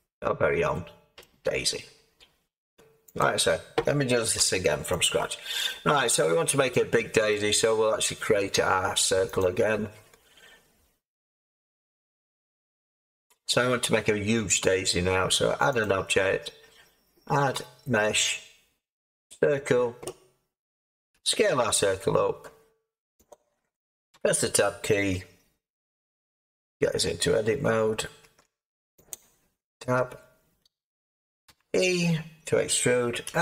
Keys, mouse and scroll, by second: 4.3 x, 21.1 s, 24.1 Tab, 31.4 e, 33.2 s.